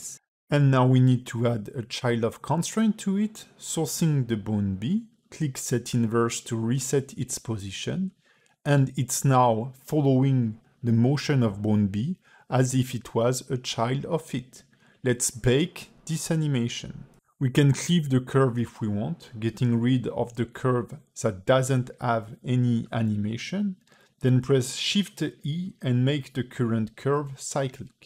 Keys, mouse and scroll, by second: 0.2 click, 1.9 click, 4.2 click, 4.5 click, 6.1 click, 6.7 space, 9.3 scroll down 2, 11.7 space, 12.2 q, 17.5 space, 19.0 space, 19.4 click, 20.2 click, 20.6 click, 21.8 x, 22.4 click, 22.7 x, 22.9 click, 23.0 x, 23.7 click, 24.4 shift+middle click, 25.5 shift+click, 25.9 click, 26.5 shift+e, 27.6 a.